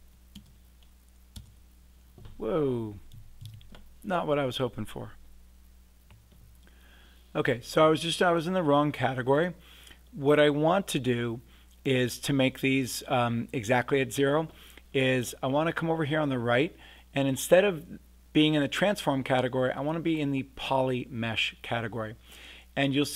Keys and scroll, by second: 0.3 0, 1.3 Return, 3.4 super+z.